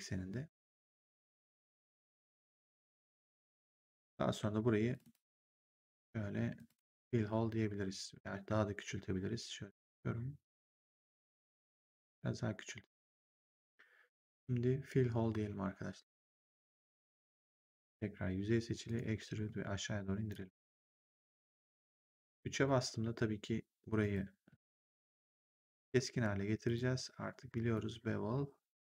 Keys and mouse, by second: 2.7 right click, 3.8 right click, 4.8 click, 6.4 click, 8.0 r, 12.0 click, 14.1 click, 16.0 click, 17.3 right click, 17.6 click, 18.8 click, 19.2 r, 20.2 click, 21.6 right click, 22.2 3, 23.0 1, 23.9 right click, 24.6 click, 25.4 shift+click.